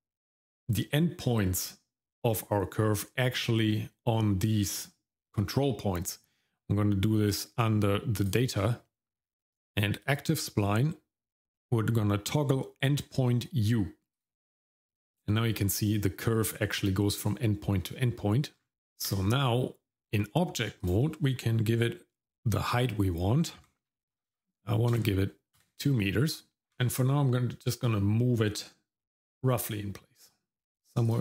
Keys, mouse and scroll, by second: 8.2 click, 10.0 click, 14.1 click, 18.5 scroll down 2, 18.7 Tab, 18.7 middle click, 18.7 scroll up 2, 20.8-25.6 drag, 24.3 KP_0, 26.7 scroll up 1, 26.7 g.